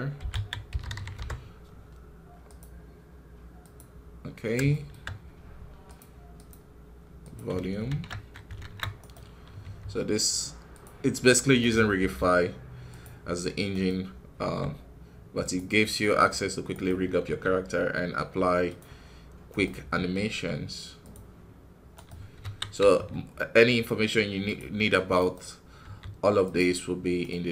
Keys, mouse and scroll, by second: 4.6-6.9 shift+middle drag, 15.8-17.2 middle drag, 17.2 g, 19.4-20.4 right drag, 22.3 KP_1, 22.8 g.